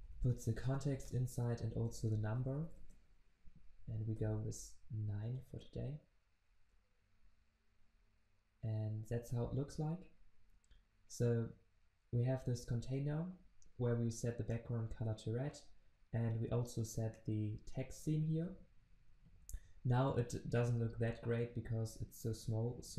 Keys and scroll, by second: 5.8 ctrl+s.